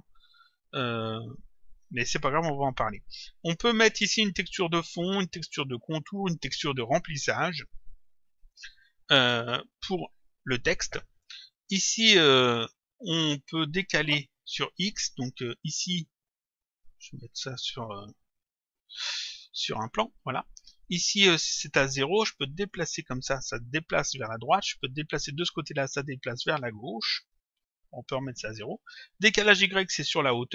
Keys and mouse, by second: 16.7 right click, 19.8 click, 22.5 click, 25.3 click, 28.0 right click.